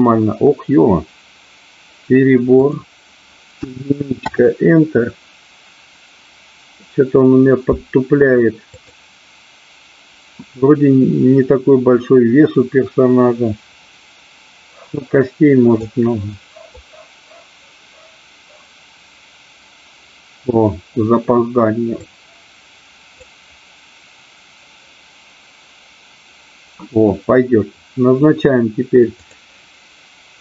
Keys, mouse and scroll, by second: 2.6-6.1 drag, 8.6-10.8 drag, 15.8-19.8 drag, 21.9-25.9 drag, 29.3 click.